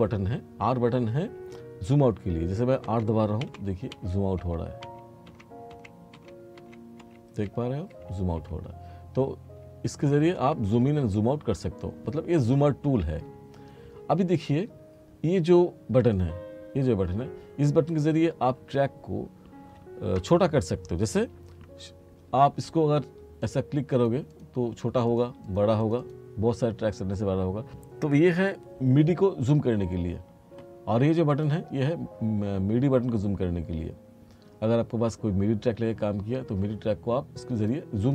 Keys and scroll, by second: 2.9 r.